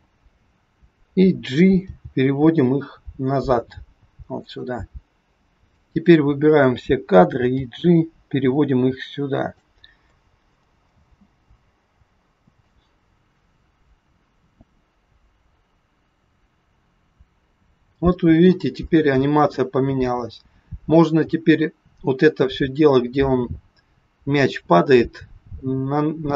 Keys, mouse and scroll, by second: 1.9 g, 5.0-5.5 scroll down 3, 5.7 click, 7.6 g, 10.9 space.